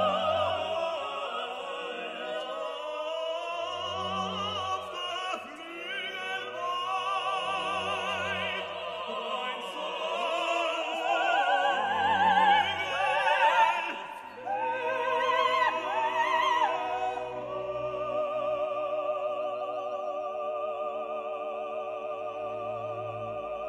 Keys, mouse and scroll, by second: 0.0 click, 1.6 click, 3.0 middle click, 4.4 click, 7.0 click, 8.4 click, 9.8 click, 10.7 right click, 11.6 click, 12.4 click, 13.4 click, 15.3 click, 17.8-19.4 drag, 19.8 right click, 21.0 click, 23.0 click.